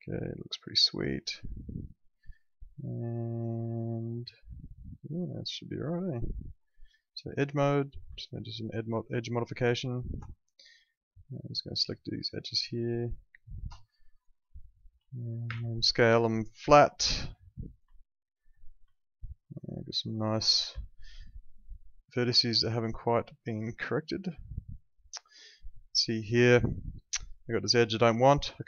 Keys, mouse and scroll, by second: 6.8 click, 8.2 alt+middle click, 9.5 ctrl+shift+click, 10.4 alt+middle click, 11.9 ctrl+click, 13.4 ctrl+shift+click, 13.8 alt+middle click, 15.4 r, 16.6 click, 18.0 alt+middle click, 18.9 alt+middle click, 20.6 w, 21.5 click, 23.7 alt+middle click, 26.4 alt+middle click, 28.4 click.